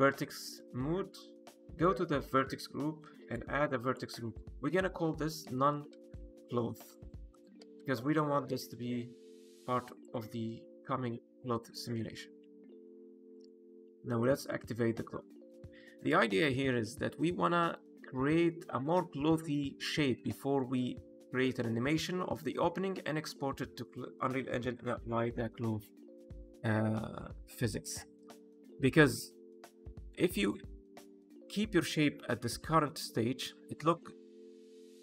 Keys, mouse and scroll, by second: 0.3 shift+middle click, 1.7 click, 3.1 click, 3.8 click, 3.9 click, 9.9 click, 10.4 middle click, 11.4 shift+middle click, 11.8 middle click, 12.3 Tab, 13.2 click, 14.3 click, 14.9-15.2 scroll down 1, 15.2 middle click, 15.9 click, 16.2-16.6 scroll up 1, 16.6 middle click, 18.3 middle click, 18.9 scroll up 2, 19.5 middle click, 20.1 shift+middle click, 20.5 middle click, 21.2-22.1 scroll down 1, 28.3 click, 28.8 middle click, 30.2 click, 30.5 middle click.